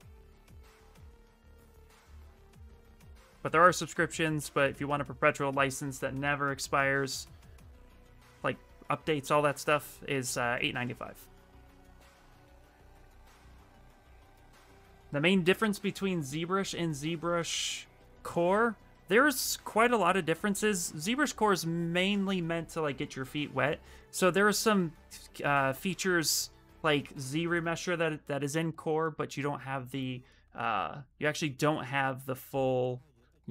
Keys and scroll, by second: 17.1 Tab.